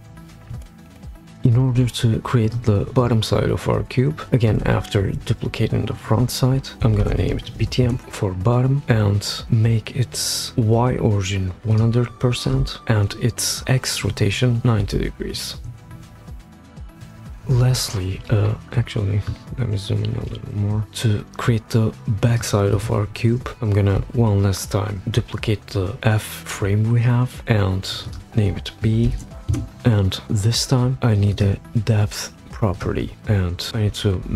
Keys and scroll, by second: 4.5 super+d, 6.7-7.9 typing, 12.2-13.2 typing, 15.3 shift+Up, 15.6 shift+Up, 15.9 shift+Up, 24.0 super+d, 29.0 shift+b, 29.5 Return.